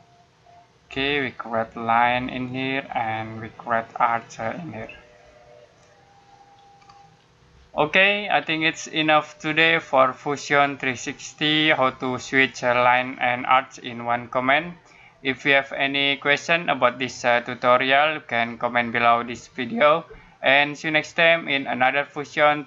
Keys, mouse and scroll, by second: 6.4 scroll down 1, 6.6 scroll up 1.